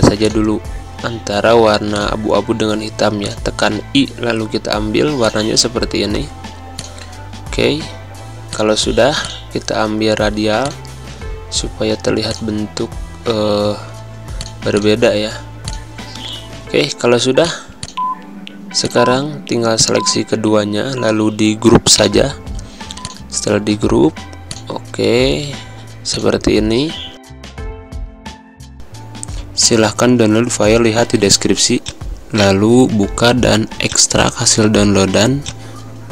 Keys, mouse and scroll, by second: 3.2 click, 20.7 click, 21.2 ctrl+z, 21.9 right click, 23.0 click, 24.4 alt+shift+click, 27.0 z.